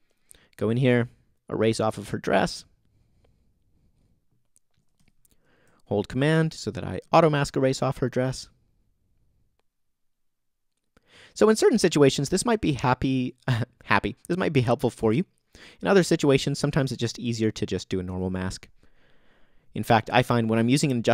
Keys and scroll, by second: 5.0 alt+super+z.